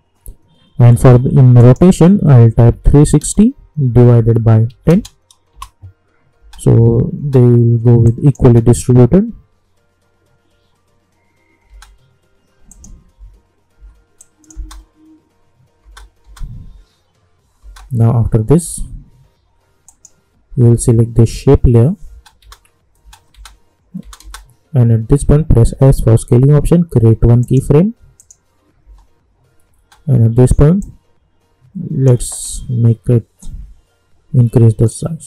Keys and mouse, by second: 1.6 click, 5.5 Return, 6.4 space, 8.0 click, 8.4 space, 11.6 space, 12.7 click, 13.1 u, 13.7 u, 14.2 click, 14.5 space, 19.8 click, 22.1 space, 25.7 s, 27.4 click, 28.8 space, 30.8-35.2 drag.